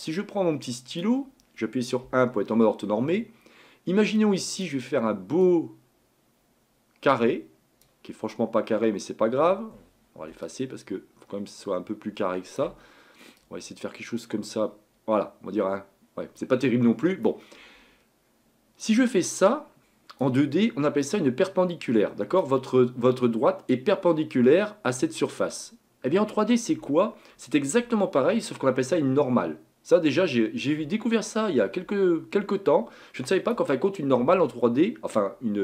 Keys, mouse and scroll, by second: 0.9-2.0 drag, 2.0 KP_1, 4.2-8.6 drag, 10.4-16.4 ctrl+drag, 18.8-24.0 drag.